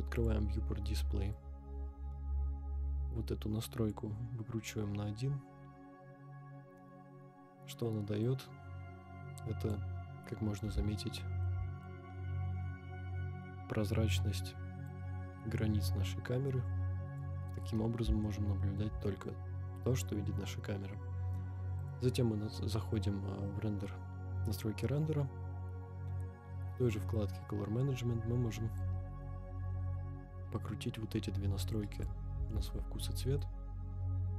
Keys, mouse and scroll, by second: 0.1 click, 1.3-4.0 drag, 4.5-4.9 scroll down 2, 4.9-5.2 scroll up 1, 8.2-9.8 drag, 10.5 scroll up 2, 10.9-11.4 shift+middle drag, 11.7-12.0 scroll up 4, 14.8-17.3 drag, 17.5-17.8 scroll down 3, 18.2-18.8 shift+middle drag, 19.5 scroll up 1, 21.8 click, 24.2-24.9 scroll down 5, 25.1-25.5 scroll down 3, 25.8-28.8 scroll down 3, 28.8-32.1 drag, 33.8 ctrl+z, 33.8-34.3 drag.